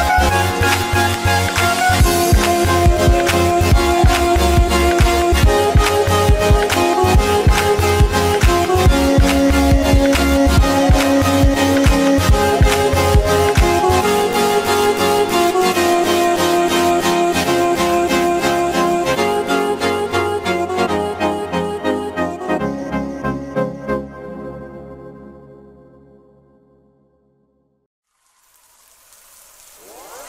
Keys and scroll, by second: 17.4 ctrl+alt+z, 21.1 ctrl+alt+z.